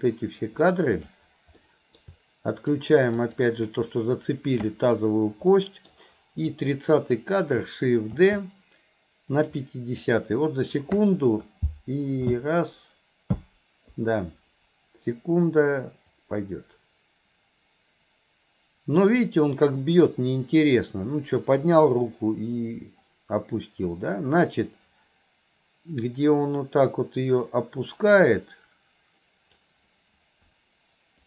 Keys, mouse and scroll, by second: 1.7 middle click, 2.6 click, 3.3 click, 5.6 middle click, 6.5-7.2 drag, 10.1-10.9 drag, 16.2-29.7 drag.